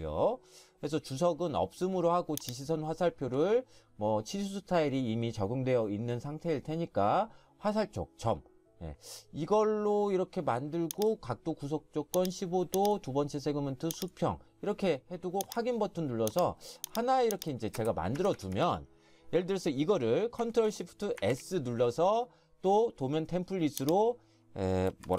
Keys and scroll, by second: 17.8 space, 18.2 Escape, 18.4 Escape, 18.6 Escape, 21.2 ctrl+shift+s, 25.0-25.1 typing.